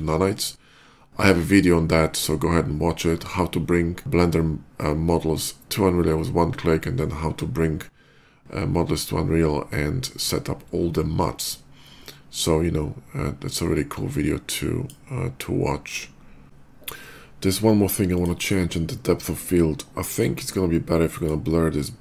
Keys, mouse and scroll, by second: 13.6-14.7 drag, 16.0 middle click, 16.2 middle click, 17.8 click, 19.8 click, 20.9 click.